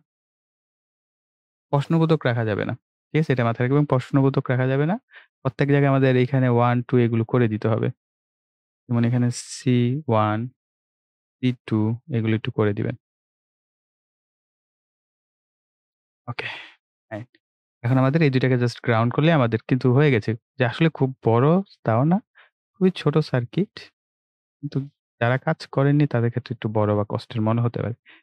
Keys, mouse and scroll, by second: 1.7 BackSpace, 3.5 click, 4.5 ctrl+s, 6.1 click, 9.5 BackSpace, 12.2 click, 14.8 BackSpace, 16.8 click, 21.5 click.